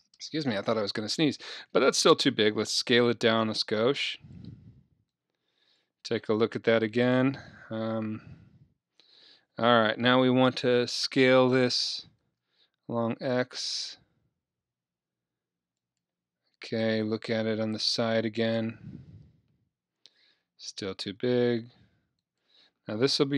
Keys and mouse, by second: 2.6 s, 4.4-7.2 drag, 6.6 KP_3, 8.3 KP_1, 12.3 s, 16.0-17.8 drag, 17.7 KP_1, 19.2 KP_3, 21.3 s, 22.4-23.3 drag.